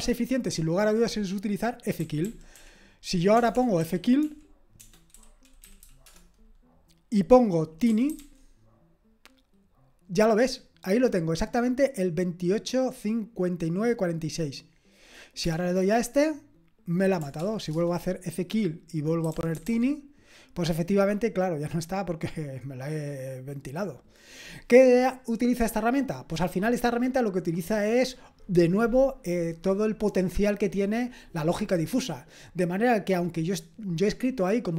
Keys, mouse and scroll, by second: 2.0-6.3 typing, 7.6-8.7 typing, 15.4 Return, 17.4 ctrl+p, 17.8 Return, 19.0-20.1 typing.